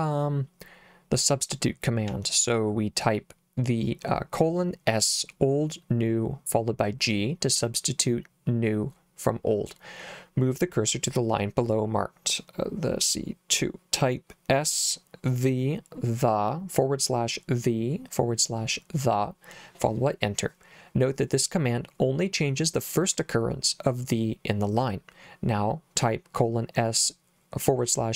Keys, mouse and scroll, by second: 2.1 k.